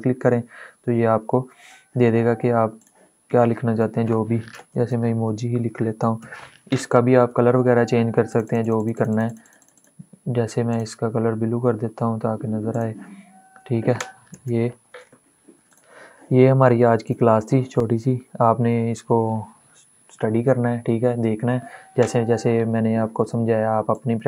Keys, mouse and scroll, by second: 2.5 click, 4.2-6.4 typing, 6.8 ctrl+a, 8.0 click, 13.9 ctrl+shift+,, 15.4 click.